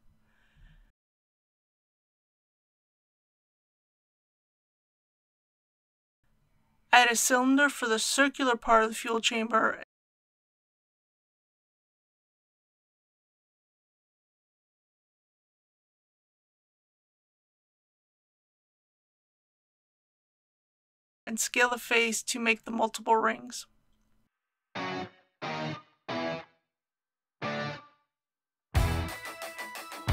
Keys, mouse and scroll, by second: 0.2 click, 1.0 alt+click, 2.3 alt+e, 2.7 click, 6.2 alt+a, 8.1 click, 9.2-10.6 typing, 12.4 click, 14.3-14.7 typing, 16.8 click, 17.6 s, 23.0 click, 23.7 scroll up 1, 24.9 shift+middle click, 25.3 scroll up 1, 27.2 click, 28.1-29.7 typing, 29.4 click.